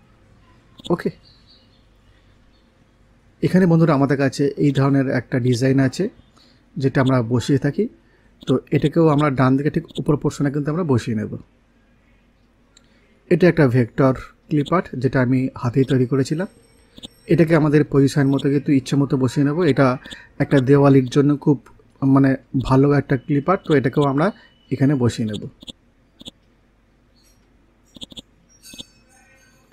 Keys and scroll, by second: 12.8 Left.